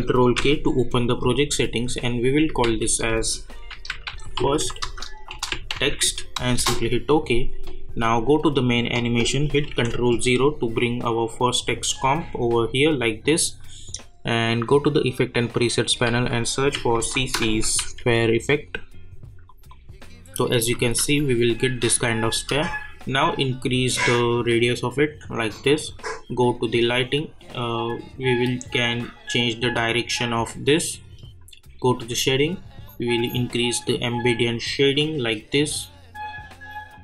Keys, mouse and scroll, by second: 0.2 ctrl+k, 2.3 click, 2.6 ctrl+a, 3.4-6.3 typing, 6.6 Return, 8.2 click, 9.6 ctrl+0, 11.3-14.4 drag, 16.1 ctrl+a, 16.5-18.3 typing, 19.5 click, 20.8 space, 23.4-26.6 drag, 28.9-37.0 drag.